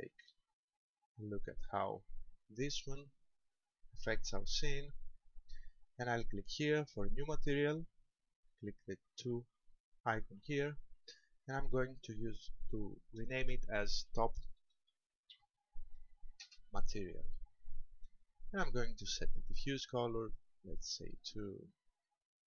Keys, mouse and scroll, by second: 0.5-2.3 scroll down 7, 2.3 middle click, 10.4 click, 11.5 click, 19.7 click.